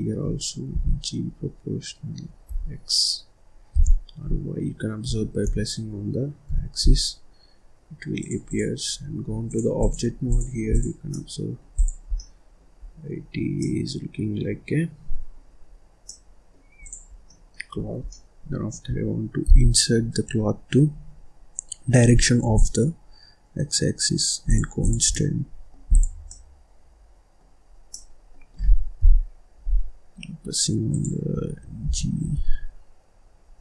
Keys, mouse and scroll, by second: 0.6 g, 8.3 click, 9.4 click, 9.7 click, 10.9 middle click, 11.7 click, 12.1 scroll down 1, 12.1 middle click, 12.8-13.2 scroll down 3, 13.2-13.5 scroll up 1, 13.5-15.6 middle drag, 15.6-16.0 scroll up 1, 16.0 middle click, 16.8 click, 17.1 scroll down 1, 17.2 middle click, 17.7 scroll up 2, 18.0 scroll down 1, 18.1-19.4 middle drag, 19.4 g, 24.8 click, 25.1 middle click, 25.9 click, 26.2-27.6 middle drag, 27.6 scroll up 2, 27.9-28.9 middle drag, 28.9 KP_7, 29.7-30.0 scroll down 1, 30.0-30.9 scroll up 4, 30.9 click, 31.8 g.